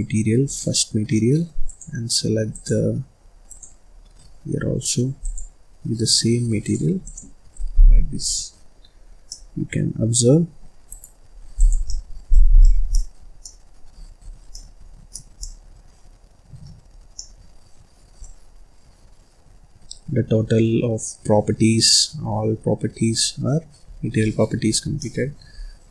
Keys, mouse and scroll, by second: 1.5 click, 2.4 click, 3.4 click, 6.8 click, 7.5-8.2 scroll up 1, 8.2 middle click, 8.9-9.2 scroll up 5, 9.2-10.8 middle drag, 10.8 right click, 11.4 click, 11.8 middle click, 12.0-13.3 scroll up 15, 12.5 middle click, 12.8 middle click, 13.3 middle click, 13.8-15.0 scroll up 17, 15.0 middle click, 15.2 scroll up 2, 15.3-16.8 middle drag, 16.8-17.1 scroll up 4, 17.1-21.1 middle drag, 23.7-24.1 scroll up 3, 24.1-25.5 middle drag, 25.5-25.9 scroll down 5.